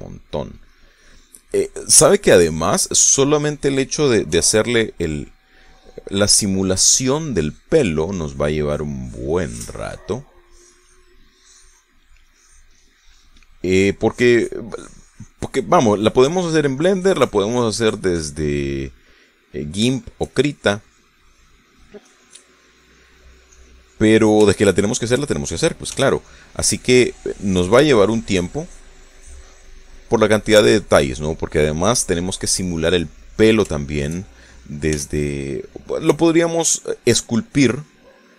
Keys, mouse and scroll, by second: 0.8 middle click, 1.7 middle click, 2.5-4.6 drag, 5.4 f, 5.8 click, 6.2 click, 7.1 click, 7.6 click, 8.5 click, 8.9 click, 9.7 click, 10.5 click, 11.5 click, 12.4 click, 13.3 click, 14.1-15.7 drag, 16.8 click, 17.3 click, 20.2 middle click, 21.0 shift+middle click, 21.5 shift+click, 22.4-23.7 shift+drag, 23.7 shift+middle click, 24.6 click, 25.6 shift+middle click, 27.0 f, 27.3 click, 27.7 click, 28.4 click, 29.0 click, 29.6 click, 30.2 click, 31.0 middle click, 33.4 click, 34.1 click, 34.8 shift+click, 36.0 f, 36.8 click, 37.2-38.3 drag.